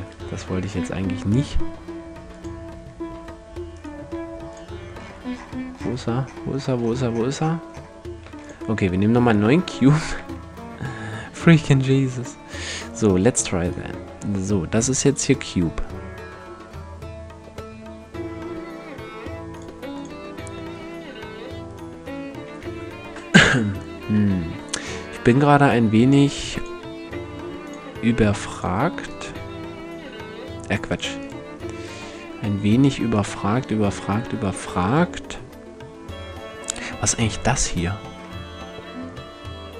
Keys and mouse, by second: 0.0 ctrl+z, 2.8 s, 3.8 s, 6.2-7.8 middle drag, 7.8 x, 9.0 shift+c, 9.8 shift+a, 13.2-14.7 drag, 14.9-16.8 drag, 16.8-19.6 middle drag, 19.6-23.2 drag, 36.9 middle click.